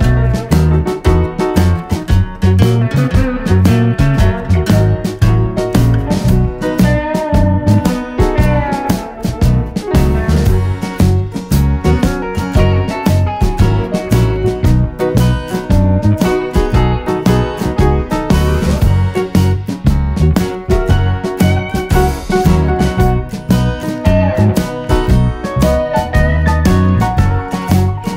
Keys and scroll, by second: 3.7 super+d.